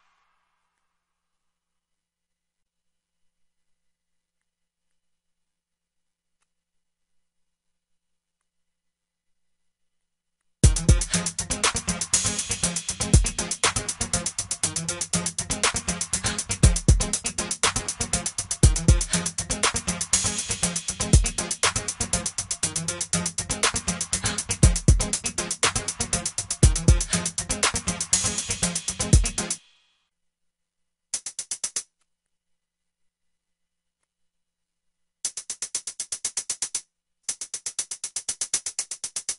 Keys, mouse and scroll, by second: 0.7 F1, 10.9 F5, 11.1 F6.